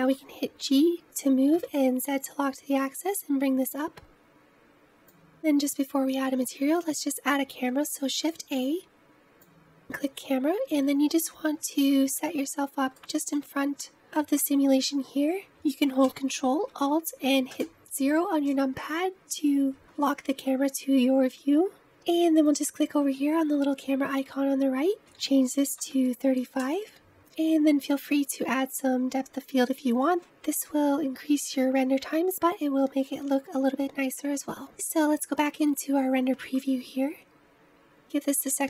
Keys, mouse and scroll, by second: 0.1 g, 4.4 scroll down 2, 4.6 middle click, 4.9-5.3 scroll up 1, 9.7 shift+a, 10.7-11.7 scroll up 4, 11.7-17.4 shift+middle drag, 17.4 ctrl+alt+KP_0, 26.5-35.9 drag.